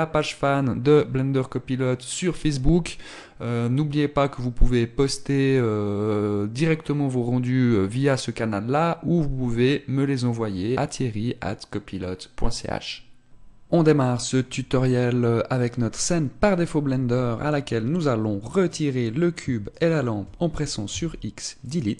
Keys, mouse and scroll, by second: 21.0 x.